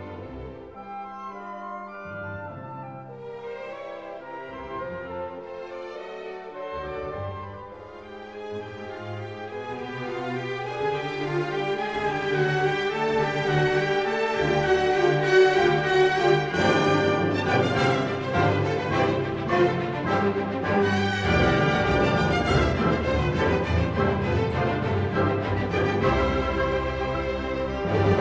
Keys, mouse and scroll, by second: 0.2 click, 0.8 click, 2.6 typing, 3.3 Return, 5.6 click, 8.3 click, 10.2 click, 11.3 click, 11.6-12.8 drag, 13.5-14.5 drag, 15.7-16.9 drag, 17.8-18.5 scroll, 18.9-20.3 ctrl+scroll, 22.1 click, 24.0 click, 24.3-26.4 scroll, 27.4 click.